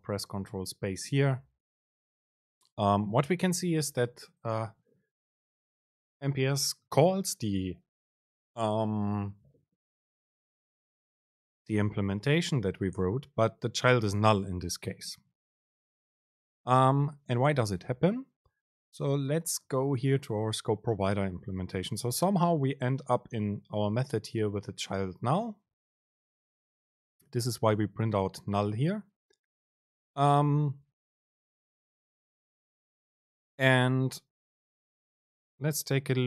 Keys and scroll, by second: 0.4 super+space.